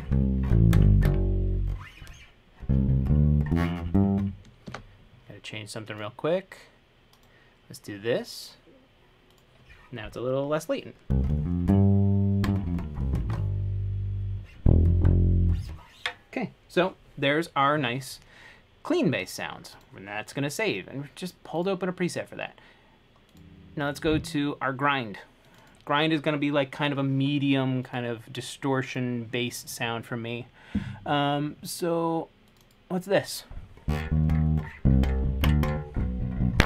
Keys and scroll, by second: 4.9 super+,.